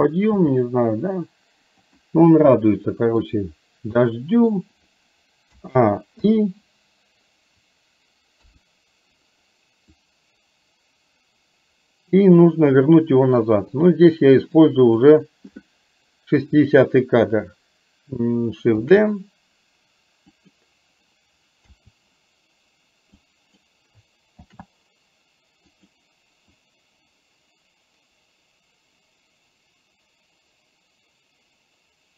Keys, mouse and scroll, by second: 0.4 g, 2.6 middle click, 4.1 middle click, 5.6 a, 6.3 i, 8.4 KP_3, 10.1-12.7 drag, 13.6 click, 14.8 click, 18.9 shift+d, 21.7 a, 23.3 click, 24.6 shift+d, 26.7-32.1 drag.